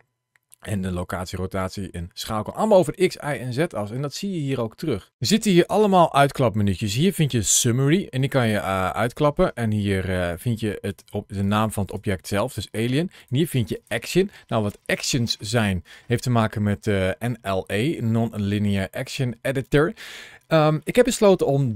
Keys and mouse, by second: 8.9 click, 10.2 click, 10.7 click, 13.1 click, 13.6 click.